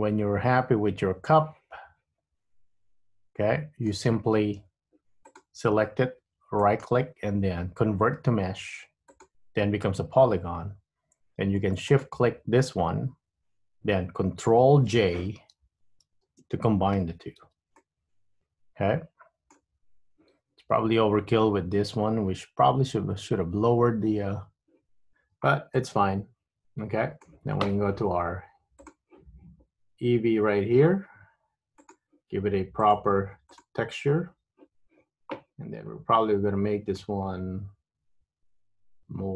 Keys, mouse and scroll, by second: 5.4 click, 6.7 right click, 12.1 shift+click, 16.1 ctrl+j, 17.5 Tab, 17.8 middle click, 25.5 Tab, 25.9 middle click, 30.2 click, 31.9 click, 33.0 click, 33.7 click, 37.1 click.